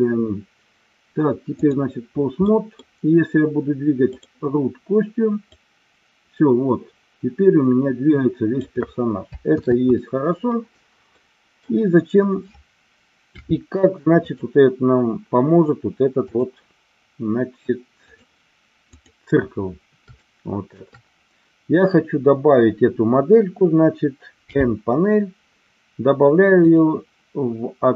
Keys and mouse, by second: 2.4 middle click, 4.2 click, 5.6-8.5 drag, 9.6 ctrl+z, 11.1 middle click, 13.4 KP_7, 14.2 click, 16.2-18.2 drag, 20.2 shift+middle click.